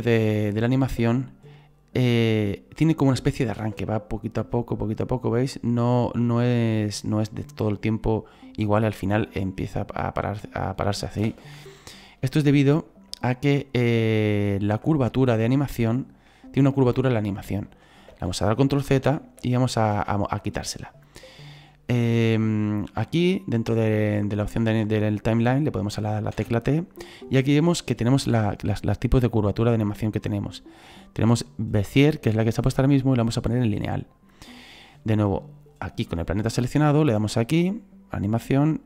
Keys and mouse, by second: 0.7 right click, 3.6 space, 11.2 space, 15.9 right click, 22.5 click, 33.7 click, 37.5 click, 38.7 click.